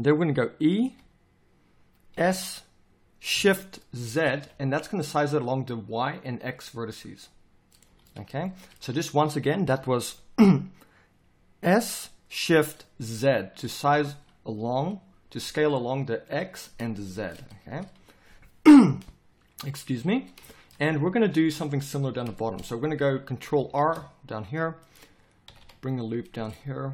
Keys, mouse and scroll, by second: 7.8 z, 14.6 z, 17.7 z, 22.9 a, 23.8 ctrl+r.